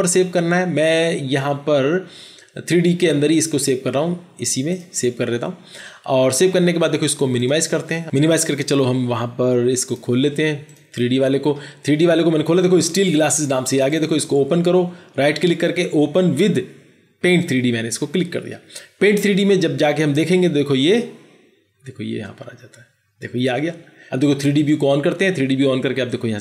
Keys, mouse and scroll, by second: 13.8 right click, 26.0 right click.